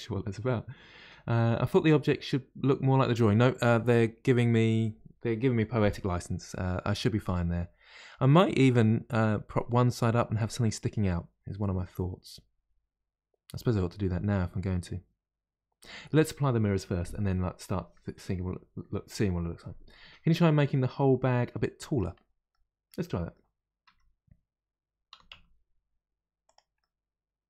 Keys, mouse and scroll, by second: 6.6-9.6 middle drag, 11.6-14.7 middle drag, 21.7-22.2 middle drag, 22.2-23.0 scroll down 1, 23.0-23.8 middle drag, 23.8 a, 26.7-27.4 middle drag.